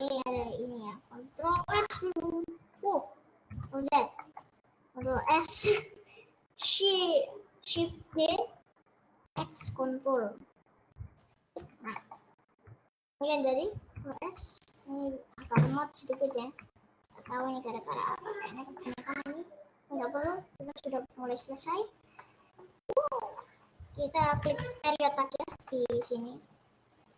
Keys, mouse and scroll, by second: 3.6 ctrl+z, 4.4-7.1 middle drag, 7.1 scroll down 2, 8.1 shift+d, 12.1 middle click, 12.6-12.9 scroll up 2, 16.3 middle click, 16.8-17.3 scroll up 6, 17.3-21.1 shift+middle drag, 21.8 shift+middle click, 21.8-22.4 scroll up 2, 22.4 middle click, 22.6 scroll up 1, 22.8-23.7 scroll down 22, 24.4 KP_Decimal, 25.6-27.1 middle drag.